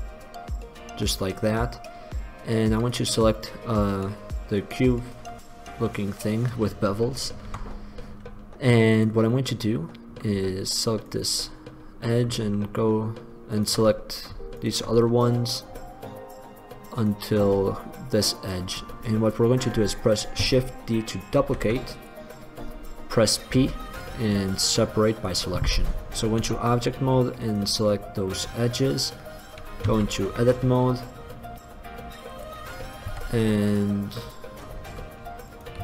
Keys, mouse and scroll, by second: 2.9-4.9 drag, 5.5-5.9 drag, 7.7 Tab, 9.5-10.9 middle drag, 11.2 right click, 17.1 click, 18.7 click, 21.6 shift+d, 23.8 p, 26.7 Tab, 28.3 middle drag, 30.1 Tab, 33.2 z, 33.9 middle click.